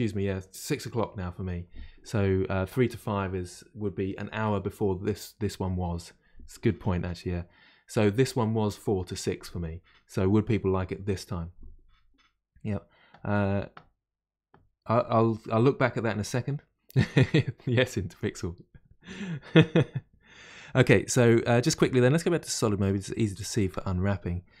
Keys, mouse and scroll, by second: 21.1-22.9 middle drag, 22.9 click, 23.4-24.6 shift+middle drag.